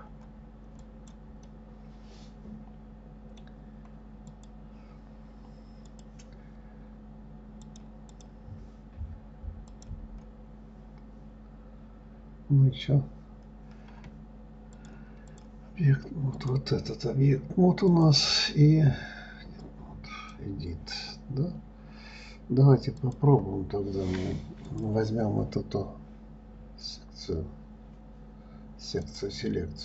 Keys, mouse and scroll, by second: 1.2 click, 1.8-4.7 middle drag, 4.7 click, 6.3 click, 8.0 click, 8.5 click, 10.1 drag, 15.2-16.9 drag, 18.3-21.3 drag, 23.4 click, 25.0 click, 29.4 click.